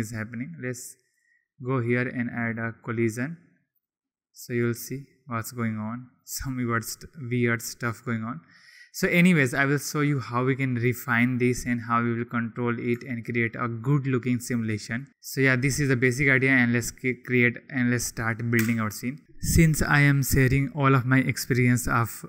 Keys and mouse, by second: 1.1 click, 2.1 click, 3.8 click, 6.2 click, 7.4 click, 8.2 click, 8.9 click, 9.7 click, 15.6 click, 18.6 Delete.